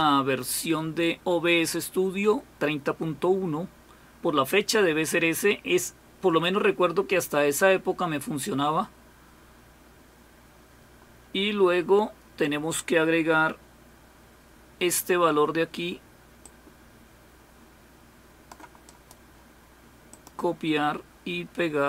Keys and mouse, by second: 16.4-18.6 drag, 20.1 click.